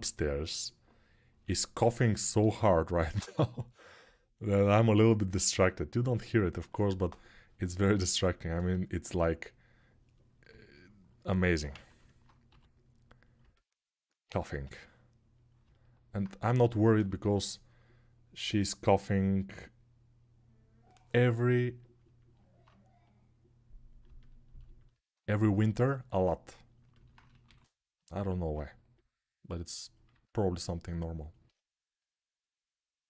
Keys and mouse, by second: 2.1 shift+d, 3.4-13.1 drag, 11.4 ctrl+z, 12.2 g, 13.1-22.9 alt+middle drag, 14.4 g, 22.9-27.8 drag, 27.2 shift+d, 27.8 alt+middle click, 28.7-33.0 drag.